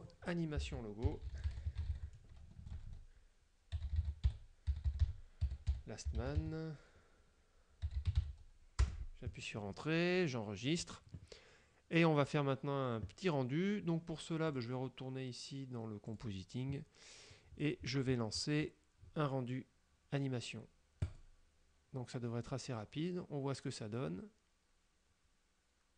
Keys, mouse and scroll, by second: 0.0 click, 0.9-8.8 typing, 9.0 Return, 10.7 click, 14.6 click, 16.2 click, 17.7-19.3 scroll up 6, 21.1 click.